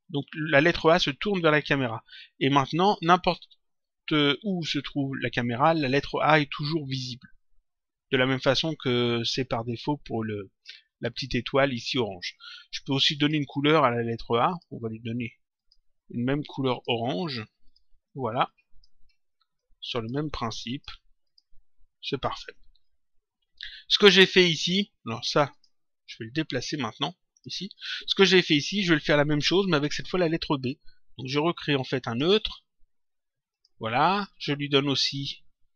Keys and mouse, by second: 2.4 click, 4.6 click, 13.1 click, 14.4 click, 15.5 click, 16.7 click, 20.6 click, 25.4 click, 26.6 click, 27.7 click, 31.2 click, 33.5 click.